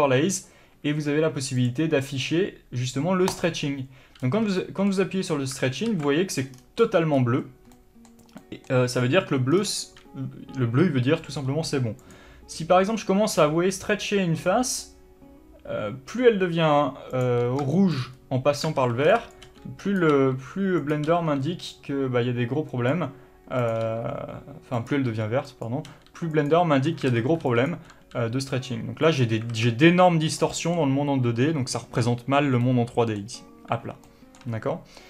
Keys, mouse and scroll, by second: 1.9 click, 3.6 click, 4.5-4.9 scroll up 1, 4.9-12.3 middle drag, 6.2 alt+a, 6.8-7.4 scroll down 2, 7.4-8.0 scroll up 2, 9.3-9.8 scroll up 2, 9.8-12.3 scroll down 2, 12.3 click, 12.8 g, 17.5 click, 18.0-20.3 shift+middle drag, 18.4-19.0 scroll up 2, 19.0 alt+a, 20.3 click, 20.4 r, 21.2 click, 21.4 g, 23.2 click, 23.9 click, 24.1 g, 25.2 click, 25.4 g, 25.9 click, 26.1 g, 26.8 click, 27.4 alt+a, 29.5 click, 29.8 alt+a, 30.8-35.0 middle drag, 33.6-34.3 scroll down 2.